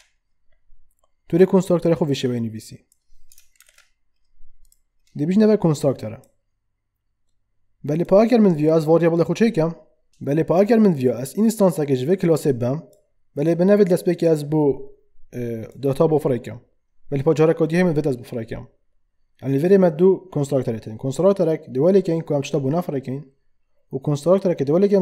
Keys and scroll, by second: 3.6 ctrl+shift+/.